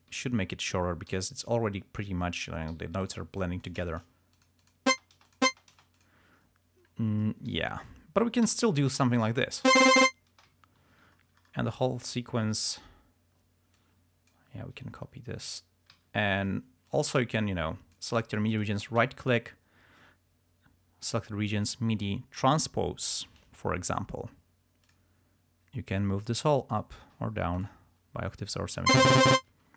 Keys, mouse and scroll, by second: 0.2 alt+d, 1.2 t, 1.6 click, 2.9 g, 3.2 click, 3.6 s, 3.8 shift+click, 3.9 shift+right click, 4.5 shift+click, 5.1 shift+space, 5.4 shift+click, 6.1 shift+click, 6.4 ctrl+shift+scroll down 2, 7.7 alt+d, 8.0 alt+click, 8.6 alt+d, 9.2 ctrl+scroll down 2, 9.7 ctrl+click, 9.9 ctrl+space, 10.5 space, 10.7 ctrl+scroll down 1, 11.3 ctrl+scroll down 1, 13.0 ctrl+scroll up 2, 13.9 ctrl+click, 16.0 alt+d, 17.2-18.5 drag, 18.8 right click, 25.0 click, 26.9 scroll down 2, 27.7 click, 28.8 click, 29.1 space.